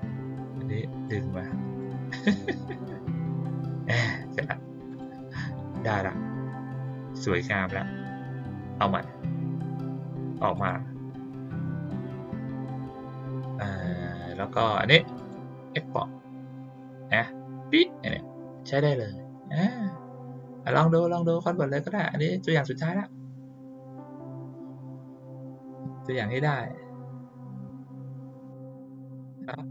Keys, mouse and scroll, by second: 0.5-1.0 drag, 1.7-3.6 drag, 4.8 click, 6.7 click, 10.5 click, 11.5 click, 15.1 click, 20.5 click.